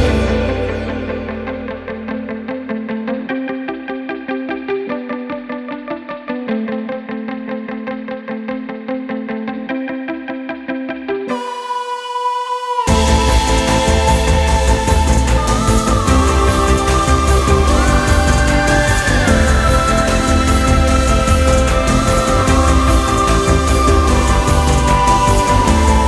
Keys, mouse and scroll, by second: 1.7-6.9 middle drag, 6.9 click, 9.2 click, 10.6 e, 18.3-21.3 middle drag, 22.8 ctrl+a.